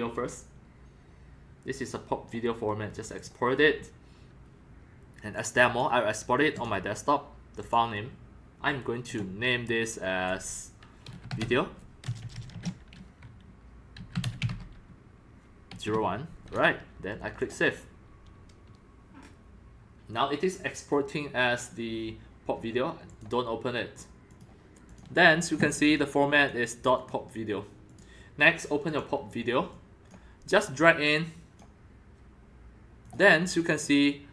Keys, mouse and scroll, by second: 1.8-2.4 drag, 3.2 click, 5.4-5.8 drag, 6.5 click, 7.6 click, 9.1 click, 9.3-11.0 drag, 11.1-12.5 typing, 13.8-16.4 typing, 17.4 click, 17.5 typing, 17.5-19.7 drag, 20.3-22.3 drag, 23.1-24.1 drag, 24.3 click, 24.9 click, 25.9 click, 26.4 click, 27.0 click, 27.9 click, 28.8 click, 29.5-30.1 drag, 30.8-33.8 drag, 34.1-34.3 drag.